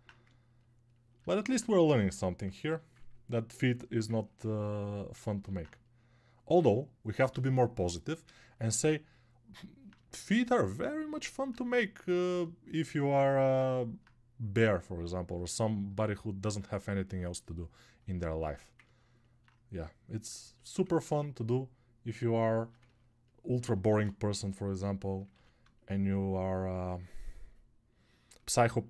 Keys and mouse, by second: 25.4 ctrl+r.